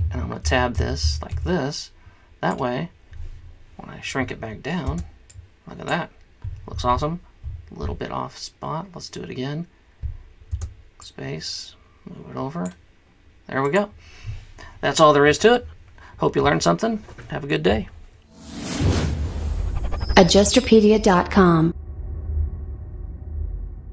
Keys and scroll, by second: 0.6 Tab, 0.8 Tab, 1.0 Tab, 1.3 Tab, 5.0 space, 10.7 space.